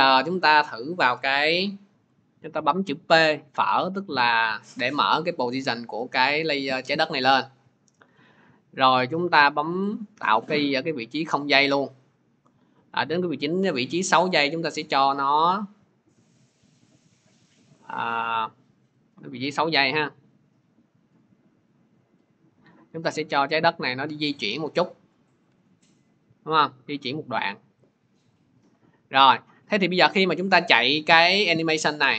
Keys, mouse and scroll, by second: 0.4-5.5 drag, 1.2 p, 9.8-20.0 drag, 20.6 click, 28.3 click, 30.2 click.